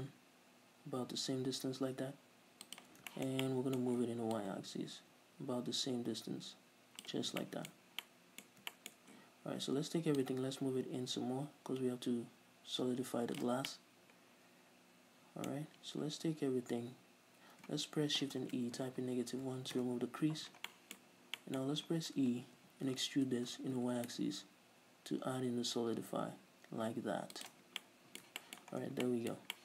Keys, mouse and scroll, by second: 2.9 shift+click, 3.1 shift+middle click, 3.1 scroll down 2, 3.9 middle click, 4.5-7.6 drag, 7.6-8.4 shift+middle drag, 7.9 scroll up 2, 9.6 a, 10.3-13.9 drag, 13.7 scroll down 1, 13.9-15.2 middle drag, 16.1 a, 18.5 shift+e, 20.0 Return, 21.2-24.3 middle drag, 21.8-22.8 scroll up 2, 26.9 middle click, 27.6 shift+click, 27.8 scroll down 1, 28.0-29.6 middle drag, 28.9 scroll down 2, 29.0 Tab.